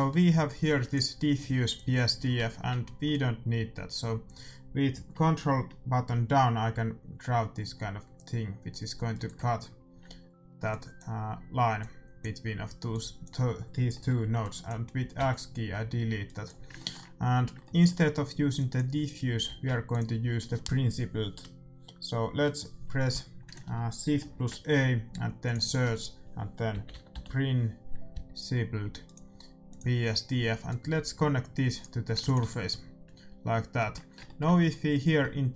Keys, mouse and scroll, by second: 0.6-6.9 drag, 0.6 middle click, 10.6-18.1 drag, 13.8-15.7 middle drag, 15.1 x, 16.7-19.3 middle drag, 18.5-20.4 drag, 19.4 shift+a, 24.2 shift+a, 30.6-32.3 drag, 32.1 ctrl+s, 33.7-35.5 middle drag.